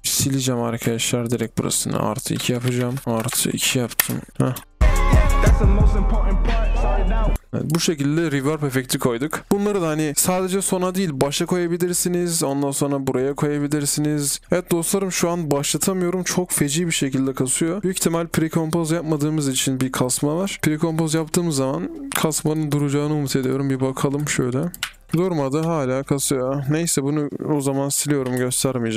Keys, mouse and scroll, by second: 4.1 Return, 4.6 typing, 11.6-14.4 alt+scroll down 1, 22.3 right click, 25.0 typing.